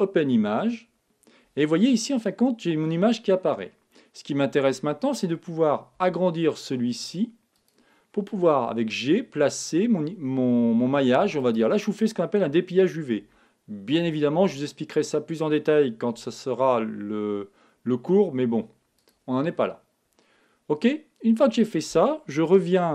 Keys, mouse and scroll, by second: 0.0-1.7 drag, 5.9 s, 7.6-9.4 drag, 8.6 g, 11.5-13.4 drag, 13.1 s, 15.0-16.8 drag, 16.1 g, 19.0-20.8 drag, 20.2-22.1 middle drag.